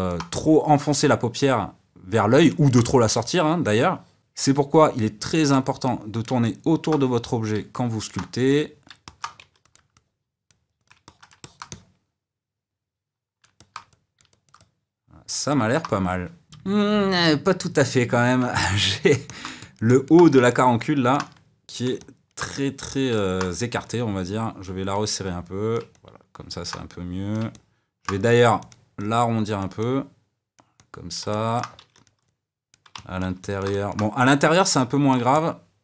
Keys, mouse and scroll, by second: 5.8 click, 6.4 middle click, 7.2 click, 7.7 middle click, 8.5 click, 9.0 middle click, 9.4 f, 9.9-11.0 drag, 11.0-23.8 middle drag, 23.8-25.9 drag, 25.9-26.9 middle drag, 26.9 click, 27.5 middle click, 28.2 f, 28.9-31.3 drag, 31.3 middle click, 31.7 f, 32.2 click, 32.9-34.2 middle drag, 34.2-35.3 drag, 35.3-35.8 middle drag.